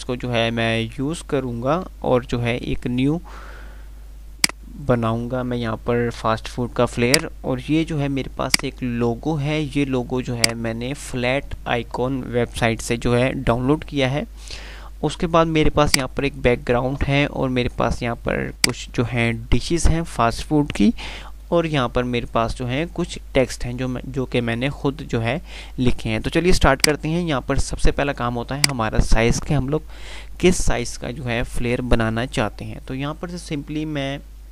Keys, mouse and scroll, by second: 2.6 F3, 3.8 F2, 7.2 click, 8.1 F2, 8.6 click, 8.8-9.3 F2, 10.5 click, 11.1-12.0 F2, 16.1 click, 16.3-17.3 F2, 17.3 F3, 18.5 click, 18.9 F2, 25.7 F3, 26.7 click, 27.3 F3.